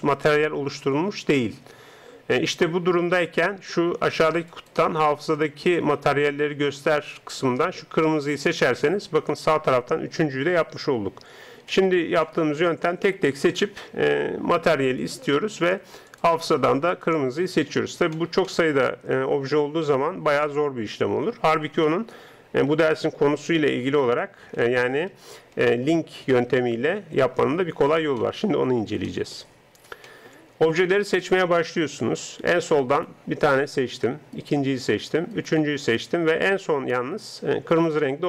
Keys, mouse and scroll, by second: 11.7-14.9 middle drag, 13.2 right click, 15.0-18.2 drag, 19.4-22.6 middle drag, 22.8 ctrl+z, 23.1 ctrl+z, 23.4 ctrl+z, 23.8 ctrl+z, 24.2 ctrl+z, 24.6 ctrl+z, 25.1 ctrl+z, 25.6 ctrl+z, 26.2 ctrl+z, 26.5 ctrl+z, 27.0 ctrl+z, 28.2-32.9 middle drag, 32.9-38.2 right drag.